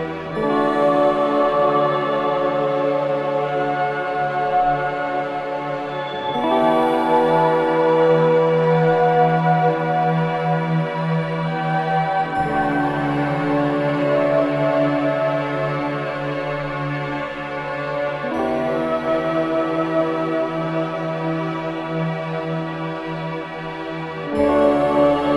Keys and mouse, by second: 1.8 typing, 2.3-3.4 drag, 4.6 typing, 6.0 click, 8.9-11.1 drag, 11.4-12.1 typing, 12.7 Escape, 13.4-14.7 typing, 15.7 click, 16.4-17.2 typing, 17.7 click, 19.1 click, 20.6-21.8 typing, 24.4 click.